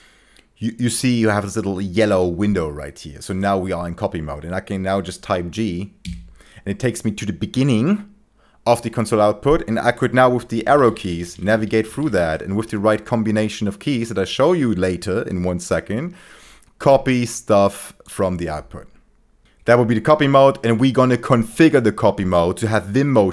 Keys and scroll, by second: 6.0 g, 10.7 Down, 10.8 Down, 11.0 Down, 11.1 Down, 11.3 Down, 11.5 Down, 11.6 Down, 11.8 Down, 12.0 Down, 19.4 super+4, 19.4 super+3.